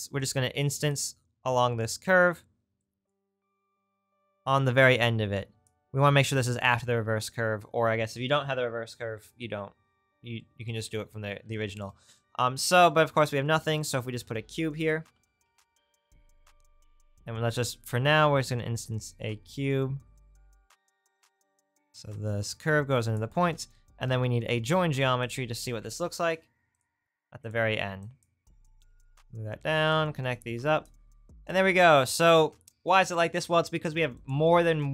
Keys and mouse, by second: 0.5 click, 0.9-2.8 right drag, 2.8-7.1 drag, 7.1-10.4 middle drag, 10.4-13.9 drag, 14.0 shift+a, 14.2-16.7 drag, 16.9 right click, 24.3 shift+a, 27.5 right click, 34.3-34.9 right drag.